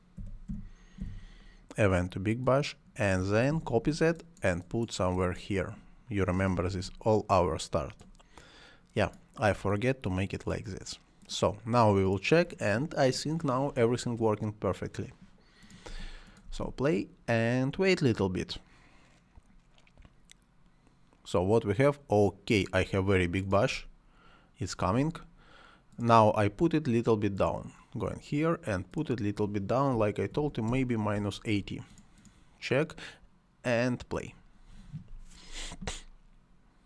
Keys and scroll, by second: 0.2 b, 0.5 i, 1.0 g, 3.5 ctrl+c, 6.7 ctrl+v, 15.9 space, 23.7 space, 29.9 -, 30.3 8, 30.7 Return.